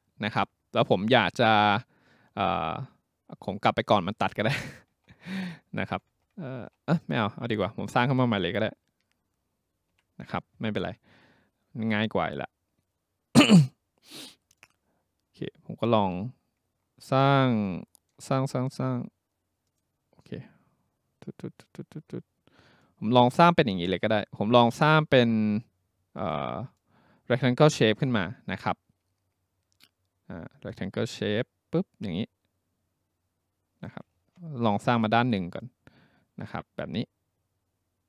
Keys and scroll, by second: 9.9 Delete.